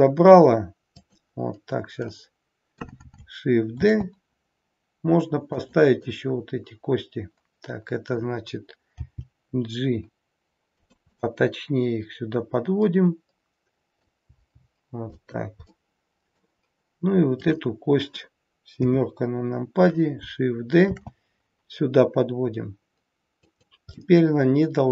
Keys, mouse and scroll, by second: 0.9 click, 2.0 middle click, 3.8 shift+d, 6.0 middle click, 9.0 g, 11.0 middle click, 15.8 middle click, 17.3 click, 18.6 KP_7, 20.8 shift+d, 23.9 middle click.